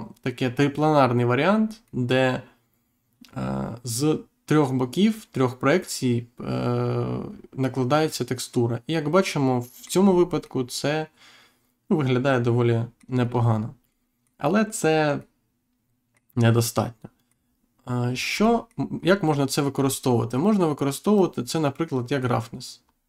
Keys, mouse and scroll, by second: 1.8 middle click, 10.0-10.3 scroll up 1, 10.3 middle click, 13.0 scroll up 1, 13.1-13.8 scroll down 1, 13.9 middle click, 15.1 middle click, 18.0-18.3 scroll down 1, 18.3 middle click, 18.6 scroll down 1, 18.9-19.3 scroll up 1, 19.7-20.1 scroll up 1, 21.1 click, 22.7-23.0 scroll up 1.